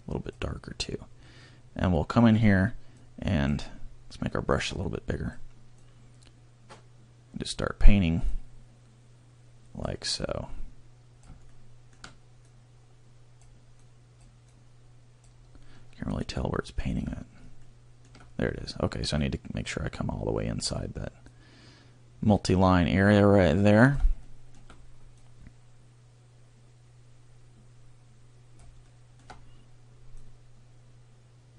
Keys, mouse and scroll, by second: 3.1 click, 12.7 click, 16.1 scroll, 19.2 click, 25.2 click, 30.3 click.